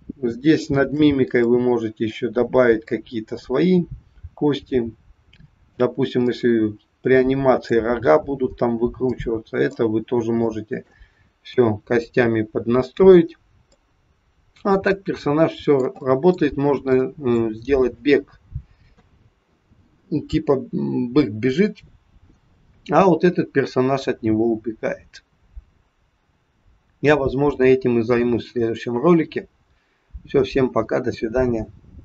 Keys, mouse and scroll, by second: 0.2-0.5 scroll down 2, 0.6 shift+middle click, 0.8 shift+middle click, 1.4 middle click, 2.9 middle click, 3.0 shift+middle click, 6.3 middle click, 9.2 middle click, 10.0-10.4 scroll down 2, 10.4 shift+middle click, 10.5 shift+middle click, 11.5 KP_3, 13.8 middle click, 16.2 middle click, 18.9 middle click, 18.9 KP_3, 30.0-30.5 scroll down 1.